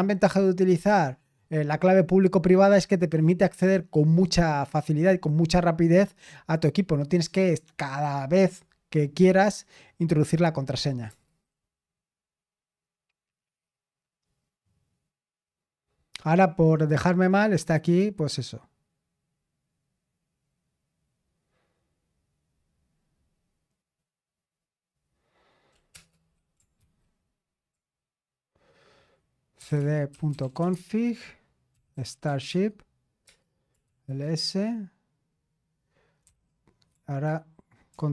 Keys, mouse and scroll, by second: 11.1 Return, 25.9 Return, 26.8 ctrl+c, 29.3-38.1 typing.